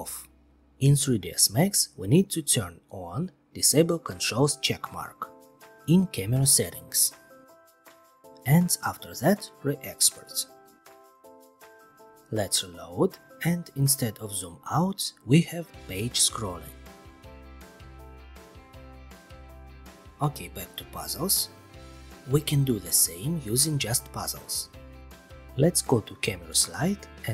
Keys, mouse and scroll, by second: 2.6 click, 3.7 click, 6.5 click, 7.7 click, 9.0 click, 11.0 click, 12.0 click, 12.2 ctrl+r, 13.4-14.6 scroll, 15.5-18.1 scroll, 19.4 click, 21.2-22.3 scroll, 24.6 click, 25.5 click.